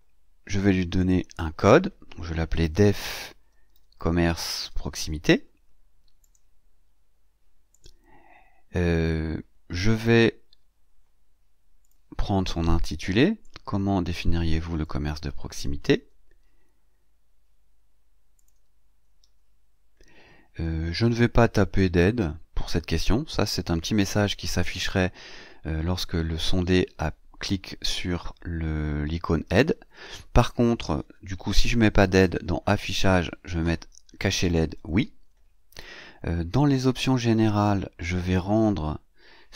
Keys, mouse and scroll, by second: 0.9 click, 2.2-5.0 typing, 6.1 click, 6.8 scroll down 2, 7.6 click, 7.9-10.4 scroll up 2, 11.7 click, 13.3-14.9 drag, 15.7 ctrl+c, 18.2 click, 19.1 ctrl+v, 20.3-20.6 scroll down 2, 21.4 scroll down 2, 31.4 click, 34.6 click, 36.4 click, 37.3-37.7 scroll down 2, 38.1 scroll down 2.